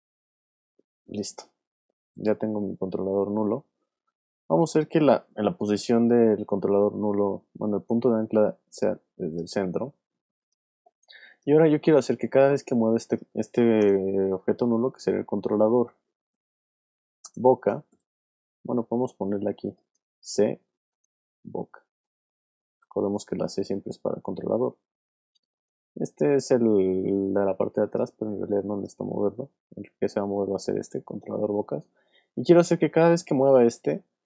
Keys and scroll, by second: 5.6 alt+y, 9.9 v, 13.8 Return, 14.4 shift+Return, 15.0-18.4 typing, 20.7-22.6 typing, 23.0 shift+Return, 23.9 Return, 33.7 shift+super+z.